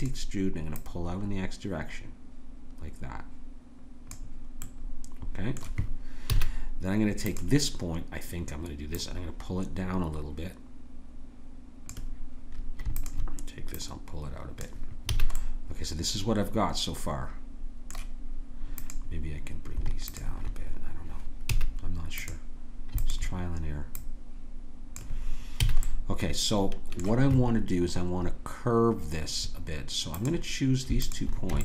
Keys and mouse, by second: 0.7-2.6 drag, 4.6 middle click, 6.3 a, 7.2-11.8 drag, 13.0 click, 15.0 a, 15.6-17.1 middle drag, 18.7-28.8 drag, 21.5 a, 25.6 a, 30.2-31.6 drag.